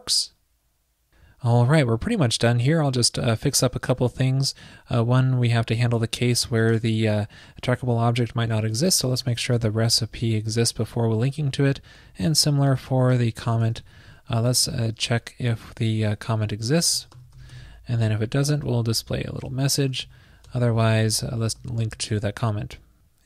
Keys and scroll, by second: 11.4 super+s, 13.2 super+Left, 16.6 alt+shift+Left, 19.1 super+v, 19.4 super+Down, 19.9 shift+super+Left, 20.0 super+x, 21.6 super+v, 22.4 super+s.